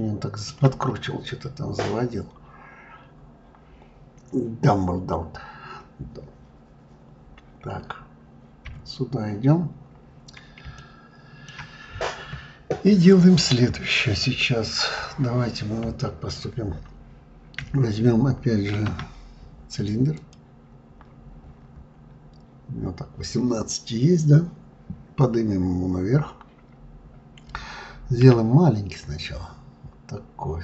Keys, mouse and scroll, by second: 0.8-1.5 scroll up 2, 1.5-1.9 scroll up 1, 1.9 scroll down 2, 8.6 KP_1, 9.5 scroll up 2, 10.7-13.7 shift+middle drag, 18.7 shift+a, 21.0-23.3 scroll down 10.